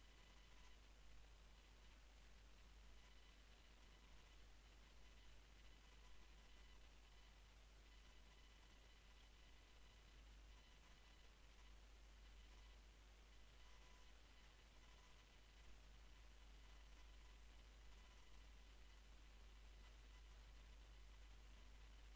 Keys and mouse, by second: 1.2-2.4 middle drag, 2.4 z, 2.8 a, 3.5 b, 4.4 z, 5.3-7.0 drag, 7.0-9.8 middle drag, 8.6 e, 11.1 f, 12.7-14.2 drag, 15.2 ctrl+b, 17.4-20.7 middle drag, 18.2 Tab, 20.4 Tab.